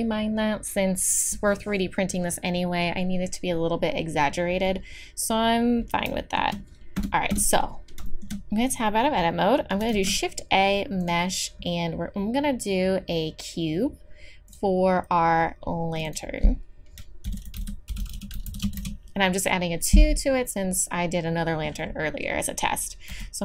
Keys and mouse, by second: 0.3-6.2 middle drag, 7.0 Tab, 7.3 Tab, 9.9 shift+a, 15.9-18.6 drag, 18.6-23.4 middle drag, 23.1 s.